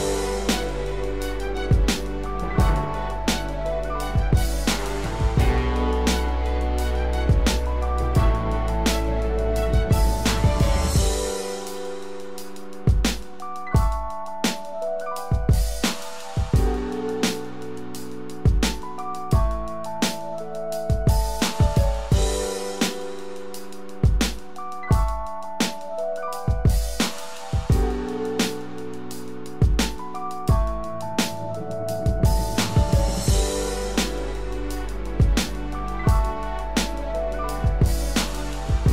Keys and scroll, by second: 20.5 ctrl+-, 21.5 ctrl+0, 22.3 ctrl+=.